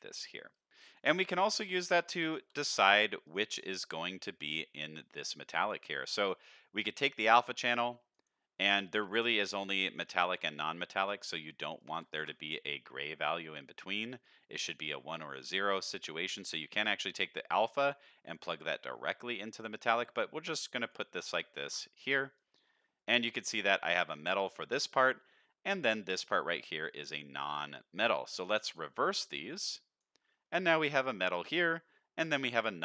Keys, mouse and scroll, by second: 0.2 middle click, 0.5 click, 1.5 click, 2.3 shift+d, 3.6 middle click, 5.0-5.6 drag, 5.9 middle click, 7.2-8.1 drag, 8.6 click, 9.1 click, 10.1 click, 10.5 click, 11.0 click, 11.8 click, 12.1 ctrl+shift+click, 14.2-14.6 drag, 15.4 middle click, 16.1 middle click, 16.8-17.7 drag, 17.9 middle click, 20.1-20.9 drag, 21.1 middle click, 21.9 click, 22.8 middle click, 23.3 middle click, 28.5 click, 29.0 drag, 29.8 drag, 30.5 middle click, 32.2 middle drag.